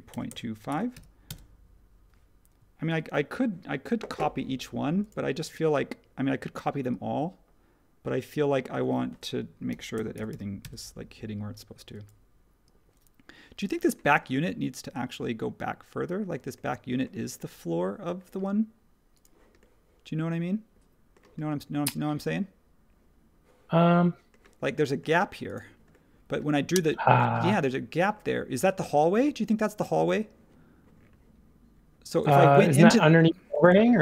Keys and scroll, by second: 0.1-1.4 typing, 3.0 super+1, 3.0 typing, 9.4-10.8 typing, 12.6-13.6 typing.